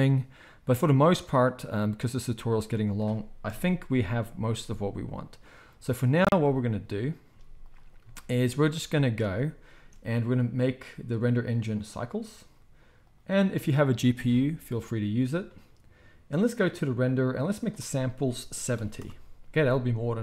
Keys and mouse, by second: 0.0-2.1 middle drag, 2.1-10.4 right drag, 3.4 KP_0, 4.5 z, 7.3 z, 9.2 space, 9.7 space, 10.4 click, 10.5-11.4 right drag, 11.4-20.2 drag.